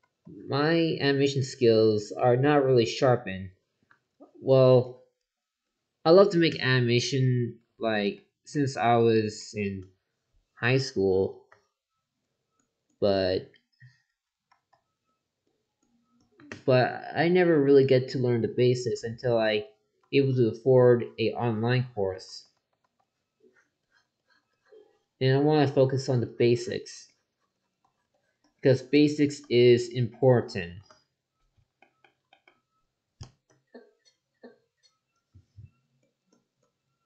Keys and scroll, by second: 0.0 ctrl+z, 14.5 ctrl+z, 17.5 ctrl+z, 20.0 ctrl+z, 22.3 ctrl+z.